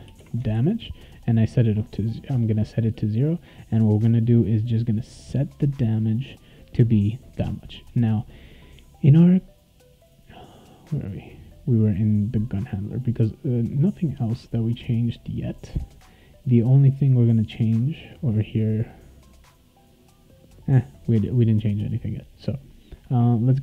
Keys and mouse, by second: 0.0 space, 0.2 0, 0.5 ctrl+s, 8.1 click, 8.8 click, 12.1 click, 18.0 click, 21.5 click, 22.3 click.